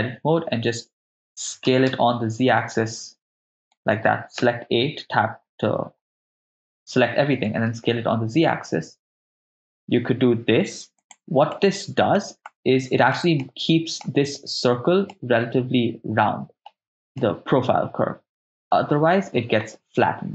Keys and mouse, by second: 1.7 s, 1.9 z, 3.6 right click, 4.4 a, 7.7 s, 7.7 z, 11.0 click, 11.6 middle click, 12.5 ctrl+middle click, 13.4 middle click, 15.2-16.7 middle drag, 17.2-19.6 middle drag.